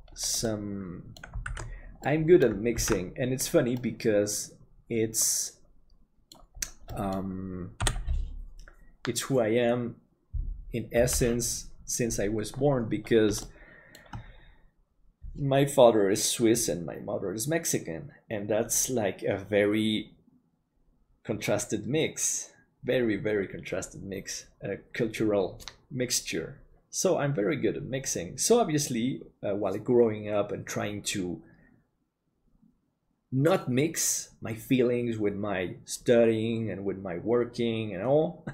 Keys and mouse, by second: 0.6 middle click, 1.6 alt+a, 2.0 middle click, 3.0 ctrl+s, 3.8-6.4 middle drag, 6.9 middle click, 7.8 KP_7, 13.4 shift+middle click.